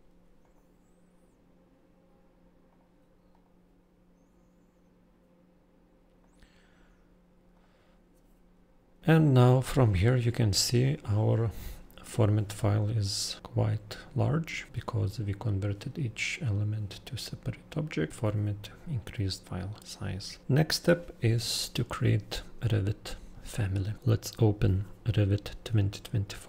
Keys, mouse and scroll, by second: 0.4 click, 2.6 click, 3.3 right click, 7.5 click, 9.9 click.